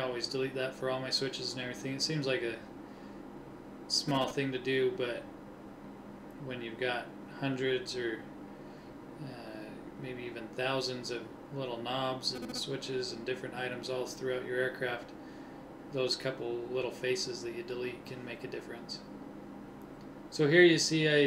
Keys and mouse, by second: 3.3 ctrl+Tab, 6.5-8.3 drag, 8.3 middle click, 8.5 click, 12.5 click, 13.1-14.5 drag, 14.5 KP_1, 16.7 e.